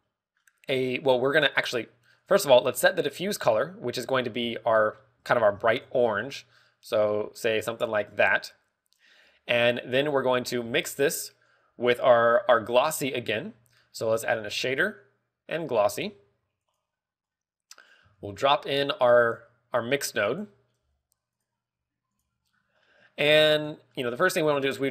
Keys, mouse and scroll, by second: 2.1 click, 2.4 scroll up 3, 3.1 click, 3.1-3.6 scroll up 1, 3.9 click, 5.3 ctrl+v, 6.3 ctrl+v, 6.6 click, 10.5 click, 11.1 middle click, 11.5-12.0 scroll up 3, 13.4 scroll down 1, 15.1 shift+a, 16.9 g, 17.7 click, 18.2 click, 19.1 shift+a, 21.7 g, 22.3 g, 22.4 click, 24.5 click, 24.8 middle click.